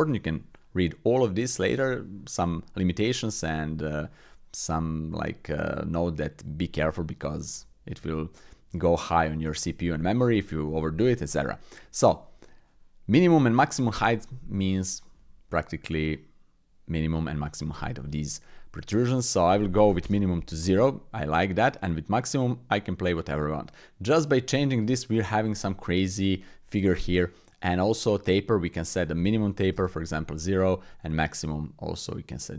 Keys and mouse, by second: 16.3-17.5 drag, 19.4 click, 22.3-24.3 drag, 24.7 middle click, 25.5-26.0 middle drag, 26.2 middle click, 26.9 middle click, 28.9 click, 31.3-32.5 drag.